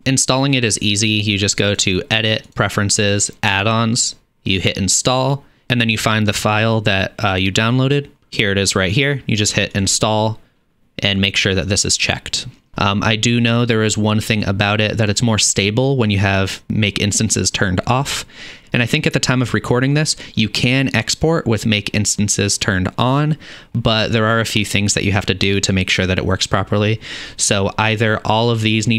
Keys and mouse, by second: 0.0-28.9 drag.